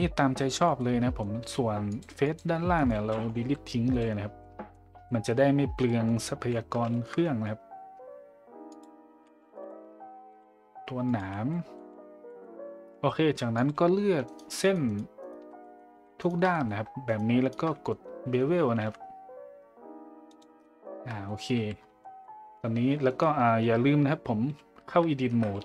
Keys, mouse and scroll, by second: 0.8 middle click, 0.8 z, 1.9 click, 2.2 click, 3.4 Delete, 4.4 middle click, 5.0 middle click, 5.8 middle click, 6.8 shift+`, 6.9 shift+middle click, 8.7 click, 11.5 middle click, 12.2 middle click, 13.5 click, 15.6 middle click, 16.5 middle click, 17.1 alt+shift+right click, 17.7 middle click, 18.8 ctrl+b, 20.6 middle click, 21.2 middle drag, 22.0 middle drag, 25.3 Tab, 25.5 a.